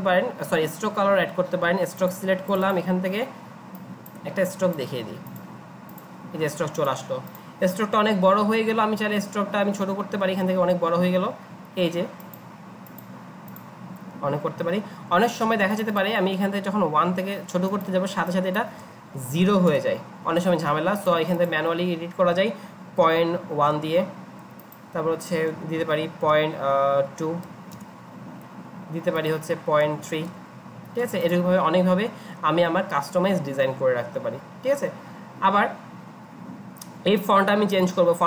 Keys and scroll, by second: 19.1 ctrl+a, 19.4 typing, 22.7-23.7 typing, 25.8 ctrl+a, 26.2-27.7 typing, 29.8-30.6 typing.